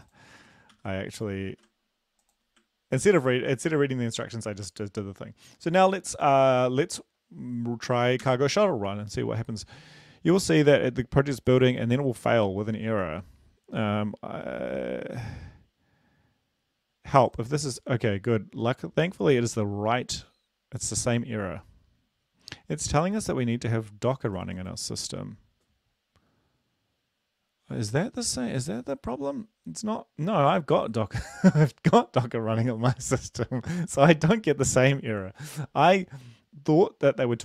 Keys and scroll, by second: 1.2 ctrl+c, 1.8 ctrl+`, 3.2 ctrl+l, 3.7 ctrl+c, 4.2 ctrl+v.